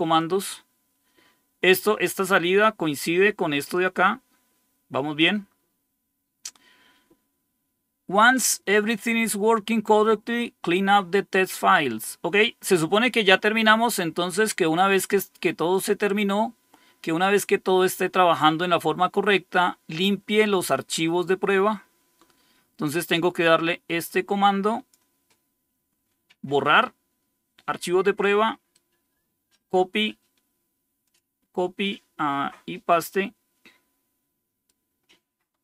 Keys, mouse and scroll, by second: 0.1-1.7 drag, 3.6-5.1 drag, 5.8 scroll down 2, 23.0-24.8 drag, 28.6 right click, 29.6 right click, 30.9 click, 32.8-34.6 right drag.